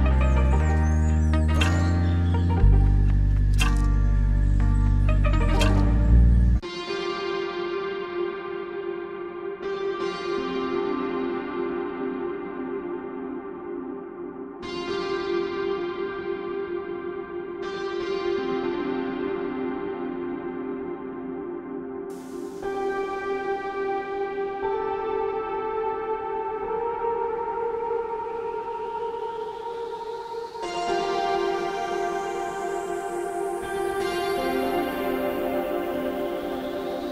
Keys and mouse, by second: 0.0 click, 1.1-2.1 drag, 2.2 click, 3.5-4.5 drag, 4.6 click, 5.3 click, 6.0 ctrl+z, 6.3 click, 7.3 ], 7.5 click, 8.4 click, 9.0 ctrl+z, 9.1 click, 10.0 click, 11.3 click, 11.3-13.8 typing, 11.5 click, 11.7 ctrl+z, 11.9 click, 12.1 ctrl+z, 12.2 ctrl+z, 12.4 click, 12.7 ctrl+z, 13.2 click, 13.8 click, 15.0 click, 15.7 ctrl+z, 18.9 click, 20.6 drag, 21.8-23.0 drag, 22.8-26.4 typing, 23.1 ctrl+z, 23.6 click, 24.2 click, 24.6 ctrl+z, 24.9 click, 25.7 click, 26.3 ctrl+z, 26.6 click, 27.5 click, 28.0 ctrl+z, 28.0 ], 28.2 click, 28.6 ], 28.7 click, 29.6-33.0 typing, 29.9 click, 30.5 click, 31.1 ctrl+z, 31.3 ctrl+z, 31.5 click, 32.0 ctrl+z, 32.2 click, 33.0 click, 34.7 click, 35.0 ctrl+z, 35.3 click, 35.8 ctrl+z, 35.8 click, 36.7 click, 36.8 click, 37.0 click.